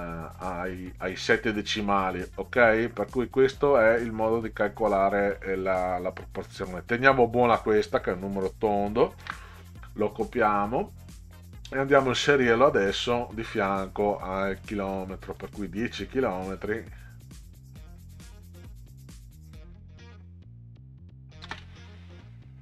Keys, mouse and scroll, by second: 4.4 click, 5.5 click, 5.7 click, 9.2 ctrl+c, 12.1 middle click, 14.6 click, 15.4 click, 15.6 click, 18.3 click, 18.5 click, 21.5 space.